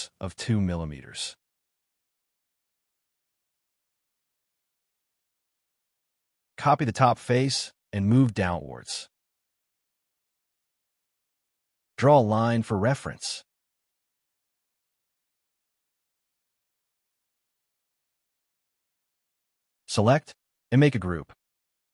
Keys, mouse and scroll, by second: 0.2 double click, 0.4 shift+click, 3.1 middle click, 3.5 space, 3.6 middle click, 4.3 scroll down 1, 4.5 space, 4.6 Escape, 4.9 scroll down 1, 5.0 middle click, 6.2 scroll down 1, 6.3 d, 6.7 scroll up 1, 7.2 m, 7.7 Up, 8.5 middle click, 10.6 shift+middle click, 11.1 l, 14.3 shift+click, 14.6 middle click, 16.3 e, 16.5 double click, 17.4 space, 17.6 scroll down 1, 17.8 middle click, 20.2 g, 20.3 scroll down 1, 21.1 middle click, 21.4 scroll up 1.